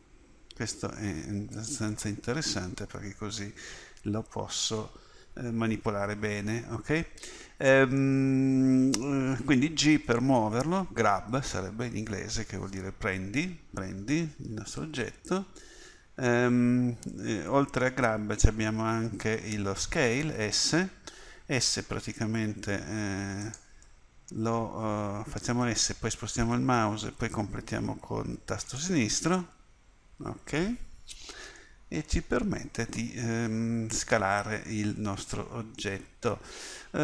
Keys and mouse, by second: 3.8 middle click, 5.2 KP_7, 15.6 KP_1, 20.3 s, 25.0 s, 32.4-33.6 middle drag.